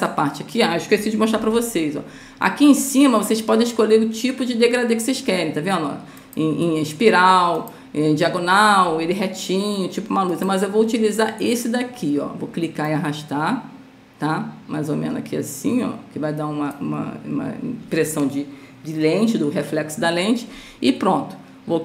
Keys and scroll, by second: 1.7 ctrl+z.